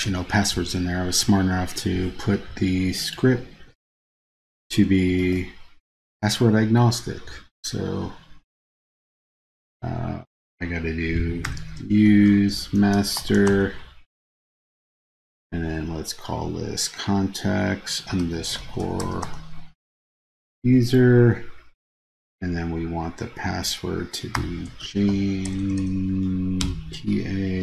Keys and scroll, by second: 0.0 super+c, 3.8 super+a, 5.3 super+v.